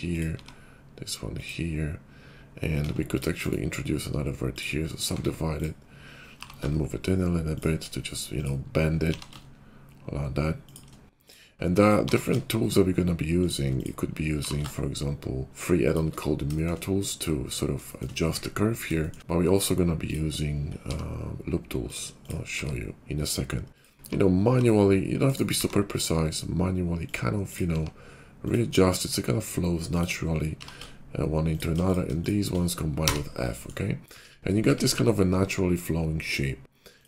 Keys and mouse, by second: 0.3 g, 2.7 Tab, 3.4-6.5 drag, 5.0 Tab, 6.2 g, 6.5-7.5 shift+middle drag, 7.5 shift+click, 8.2 middle click, 8.3-13.7 drag, 9.0 g, 12.0 g, 13.7 middle click, 13.8-25.3 drag, 14.2 g, 20.7 g, 21.9 middle click, 21.9 right click, 22.2 g, 23.9 g, 25.3-27.4 middle drag, 25.5 g, 27.4 click, 27.5 middle click, 27.6 g, 30.5 g, 31.7 click, 33.0 f, 34.0 `, 34.6 `.